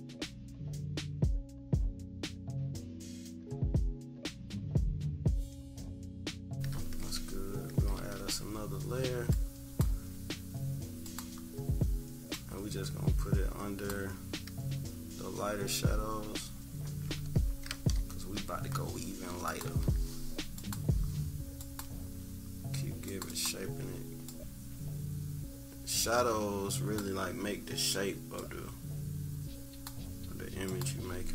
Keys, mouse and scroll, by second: 1.0 click, 2.4 click, 2.9 click, 3.6 click, 4.5 click, 4.8 click, 5.9 click, 6.1 click, 6.3 -, 6.7 =, 7.0 =, 7.9 =, 9.3 click, 11.0 click, 12.3-14.9 drag, 14.9-15.2 scroll down 1, 15.6 =, 16.3 scroll up 1, 17.1 =, 17.7 -, 17.9 -, 18.2 -, 19.4 click, 20.5-23.2 drag, 23.3 click, 24.2-27.0 drag, 28.3-29.8 drag, 30.6 click, 31.1 =.